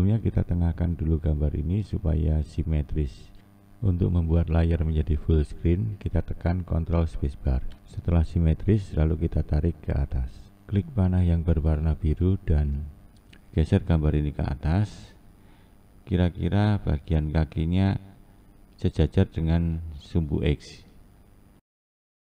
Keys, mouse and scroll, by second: 5.0 ctrl+space, 10.1-11.4 scroll down 6, 11.4-11.9 scroll up 4, 17.8 click.